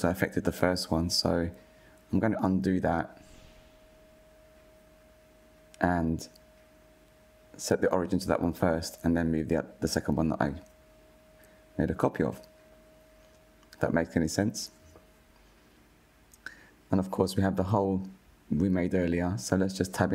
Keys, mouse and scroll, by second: 0.9 click, 4.9 ctrl+z, 5.3 ctrl+z, 6.6 click, 7.5-10.6 right drag, 10.7 click, 11.2 click, 12.7 click, 16.0 click, 16.6-18.5 middle drag, 18.5 KP_1, 19.5-20.1 middle drag.